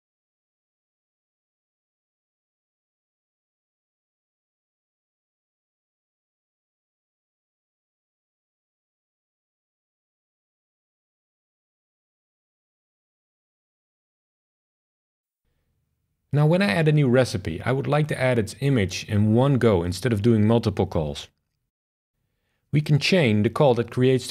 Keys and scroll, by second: 4.6 shift+Left, 4.8 BackSpace, 4.9 alt+shift+Right, 5.3 super+v, 8.0 shift+super+r.